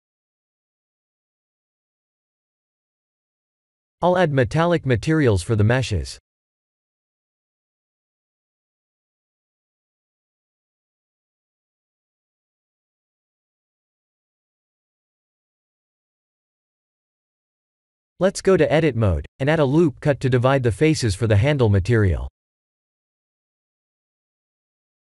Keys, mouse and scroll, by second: 0.2 click, 2.4 click, 4.6 click, 5.4 click, 6.4 click, 9.1 click, 12.2 click, 16.3 click, 19.3 Tab, 20.4 ctrl+r, 23.9 shift+z, 24.3 3, 24.7 click, 24.9 b.